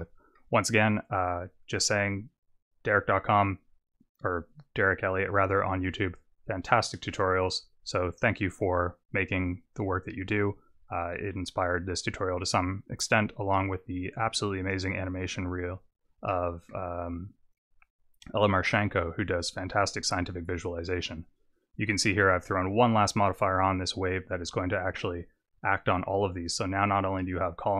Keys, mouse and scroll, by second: 0.6 scroll up 3, 4.2-4.6 scroll down 2, 7.1 click, 9.5 click, 16.2 middle click, 18.6-19.3 scroll down 1, 19.3-20.4 scroll down 1, 20.8-21.8 scroll up 2, 22.6 click, 26.0 click.